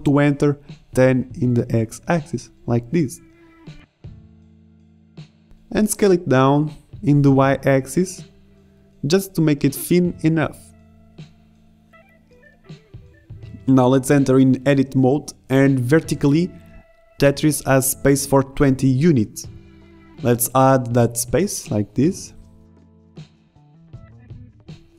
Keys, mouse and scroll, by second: 6.0 s, 14.0 KP_1, 14.5 Tab, 14.6 a, 14.6 b, 14.9 click, 16.2 a, 16.5 b, 17.0 click, 17.6 click, 22.8 click, 24.0 middle click, 24.0-24.6 scroll down 1.